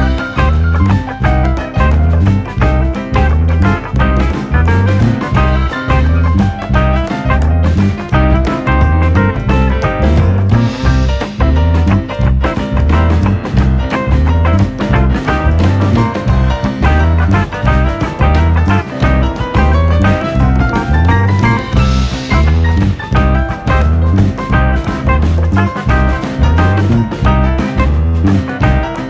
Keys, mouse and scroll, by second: 0.2 Tab, 0.3 click, 0.4-1.1 scroll down 3, 0.7 middle click, 1.1-2.0 shift+middle drag, 2.0 drag, 2.4 shift+drag, 2.7 shift+drag, 3.4 shift+drag, 3.7 shift+click, 4.1 shift+drag, 4.6 ., 5.5 s, 7.4 KP_7, 7.7-8.5 scroll up 2, 8.5 scroll up 1, 8.5 s, 9.7 scroll down 2, 9.8 middle click, 10.3-11.0 scroll up 1, 11.0 ctrl+a, 12.1 click, 12.3-12.6 scroll up 1, 12.6 middle drag, 12.9-13.6 scroll up 6, 13.6-13.9 scroll down 11, 13.9-14.4 middle drag, 14.4 ctrl+s, 15.9 click, 16.2 KP_7, 16.7 shift+middle drag, 17.0 scroll up 1, 18.1 shift+d, 19.5 scroll up 1, 19.9 shift+middle drag, 20.1 scroll up 1, 20.4-20.7 shift+middle drag, 20.7 click, 21.7 scroll down 1, 21.9-22.4 middle drag, 22.4 drag, 22.5-22.9 middle drag, 22.9 click, 23.2 click, 24.1 middle drag, 24.2 click, 24.4-25.4 middle drag, 25.4 click, 25.7 KP_7, 26.2 shift+middle click, 26.7 shift+d.